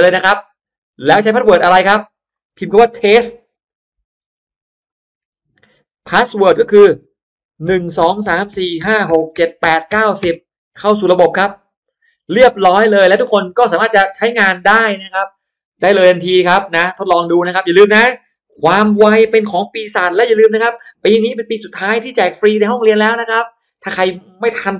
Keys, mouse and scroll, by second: 0.9 click, 2.0 click, 3.0-5.8 typing, 6.2 click, 6.7 click, 7.6-10.3 typing, 10.9 click, 13.8 click, 16.3-17.5 drag, 17.7-18.1 scroll down 1, 18.1 middle click, 18.5 scroll down 1.